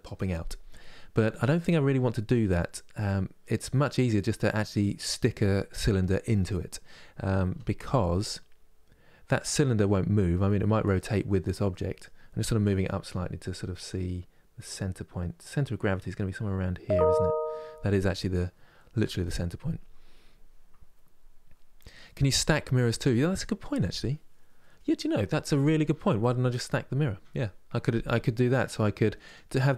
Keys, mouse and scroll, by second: 10.1-12.2 middle drag, 12.2 KP_3, 28.2 middle click, 28.9-29.7 drag.